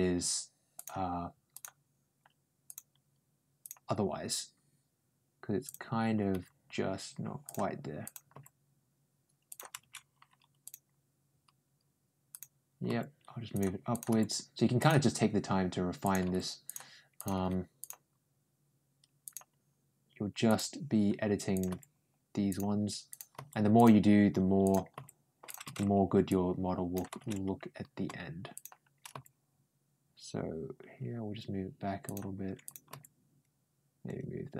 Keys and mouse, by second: 0.6 click, 1.4 click, 2.5 click, 3.5 click, 5.5 click, 6.2 g, 7.9 click, 8.2 g, 10.5 click, 12.2 ctrl+click, 12.7 ctrl+g, 13.8 click, 13.9 g, 15.8 click, 16.1 g, 17.0 click, 17.2 g, 19.1 click, 20.3 click, 21.4 click, 21.5 g, 22.9 click, 23.2 g, 24.5 click, 24.8 g, 26.1 click, 28.4 click, 28.9 ctrl+g, 32.5 click, 32.7 g.